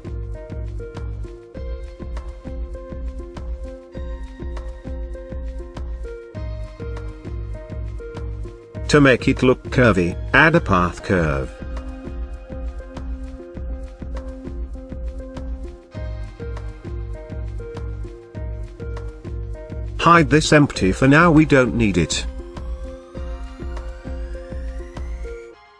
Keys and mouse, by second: 0.1-1.2 middle drag, 2.1-4.2 drag, 4.5-4.9 middle drag, 7.9 click, 11.3 shift+a, 15.0-15.6 middle drag, 21.9 click, 24.6 Tab, 25.5 Tab.